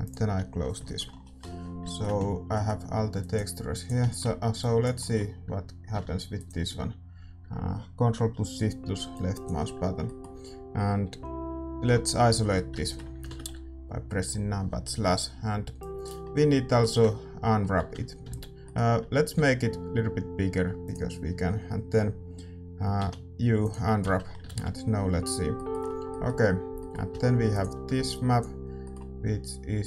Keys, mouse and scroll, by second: 4.6-9.6 drag, 4.6-9.1 middle drag, 9.6-11.8 middle drag, 10.0-11.8 drag, 11.8 KP_Divide, 12.3-16.5 middle drag, 13.4 shift+z, 15.8-20.3 drag, 16.7 middle click, 20.3 Tab, 20.3-24.3 middle drag, 20.3 z, 20.3 s, 24.2 u, 24.5 shift+z, 27.5-29.8 drag.